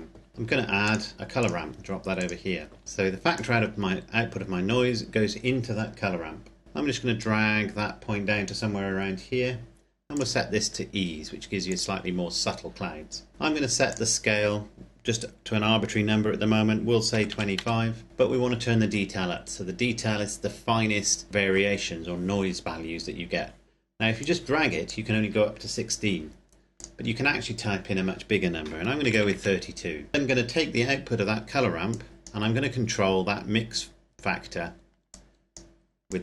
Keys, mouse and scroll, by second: 3.3 click, 7.1 click, 13.8 click, 17.0 KP_2, 17.2 KP_5, 17.4 KP_Enter, 24.1 click, 29.2 KP_Enter, 30.1 middle click, 31.8 click, 32.5-34.5 scroll up 1, 34.5-34.9 scroll up 1, 35.0 click.